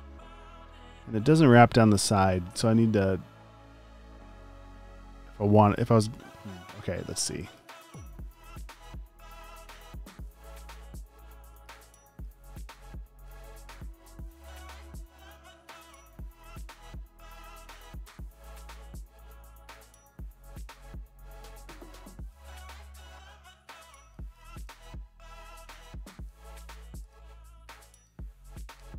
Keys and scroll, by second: 7.3 space, 7.9 super+space, 8.5 v, 13.5 super+z, 19.9 super+z, 23.2 space, 27.6 space, 28.8 shift+super+g.